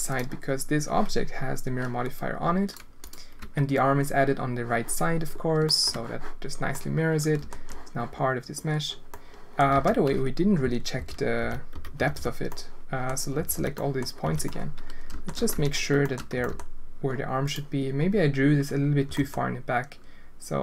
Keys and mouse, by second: 3.0 click, 3.3 Tab, 5.7 shift+middle click, 6.7 click, 8.2-9.5 drag, 9.7 alt+a, 10.6-12.1 typing, 12.5 click, 13.3 l, 13.5 l, 13.7 click, 14.2 l, 14.4 click, 15.5 z, 16.0 shift+click, 16.3 g, 19.0 g.